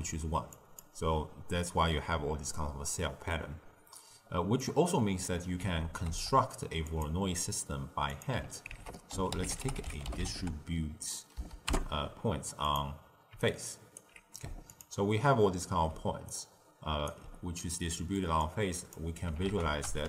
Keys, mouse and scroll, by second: 0.4 click, 0.7-2.4 d, 4.5 click, 5.5 g, 8.0 click, 8.6 ctrl+a, 13.4-14.6 alt+right drag, 14.6 ctrl+shift+click, 15.9 d, 16.2 right click, 17.0 d, 17.9 middle click, 18.3 click, 19.4 ctrl+a.